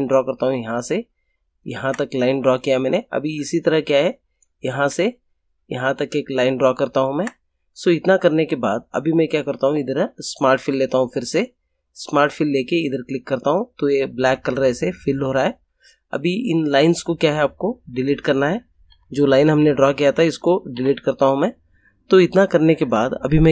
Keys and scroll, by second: 18.8 Delete, 20.7 Delete.